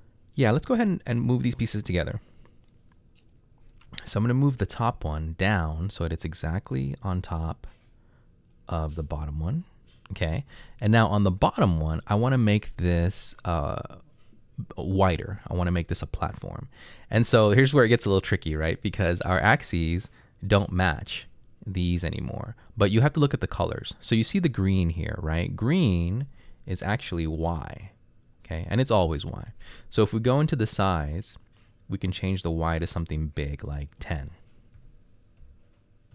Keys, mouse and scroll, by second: 8.1 click, 11.4 click, 34.8-35.4 typing.